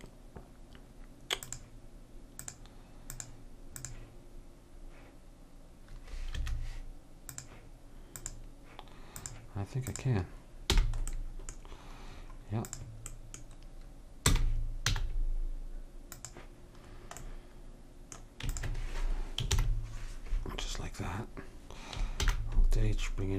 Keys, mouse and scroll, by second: 2.4-5.7 drag, 7.3-10.8 drag, 10.8 h, 11.2 middle click, 11.7-12.1 scroll down 1, 12.7-14.5 drag, 14.3 r, 18.6 click, 19.5 ctrl+j, 22.2 alt+h.